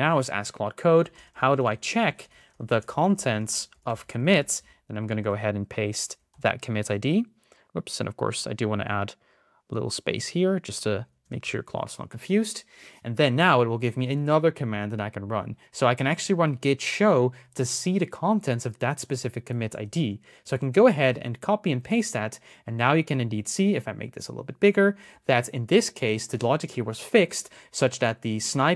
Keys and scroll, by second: 1.2 shift+space, 5.0 super+v, 6.1 shift+?, 6.8 Left, 19.6 super+c, 20.8 super+v.